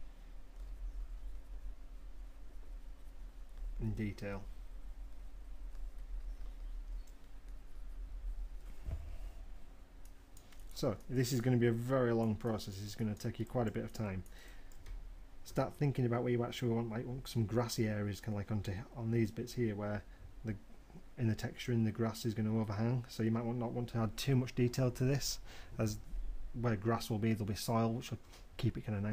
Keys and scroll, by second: 1.2 m.